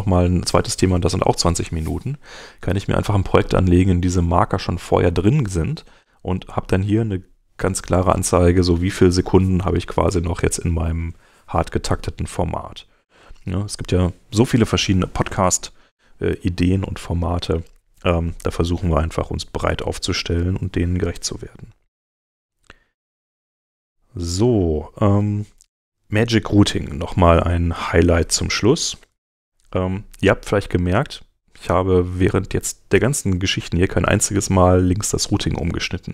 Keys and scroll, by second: 19.6 super+Tab, 28.9 super+Tab.